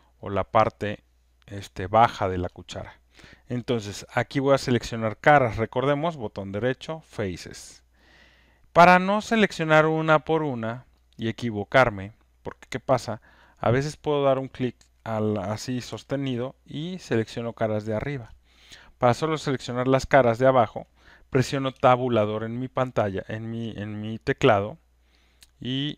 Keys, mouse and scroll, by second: 0.2 alt+middle click, 2.6 alt+click, 6.9 right click, 10.5 click, 11.0 click, 12.0 click, 14.4 click, 18.3 click, 19.1 click, 21.7-23.6 Tab, 24.4-25.3 Tab, 25.2 click, 25.2 Tab, 25.5 Tab, 25.7 Tab, 25.9 Tab, 25.9 click.